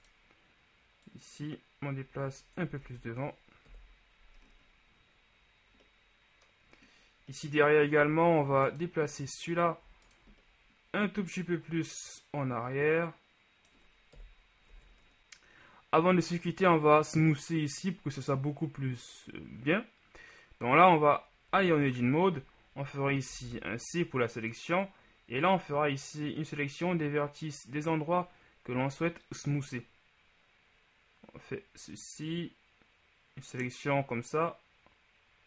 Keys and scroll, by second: 3.0 Tab, 3.8 KP_1, 8.2 Tab, 14.4 KP_1, 14.8 Tab, 21.8 Tab, 23.5 c.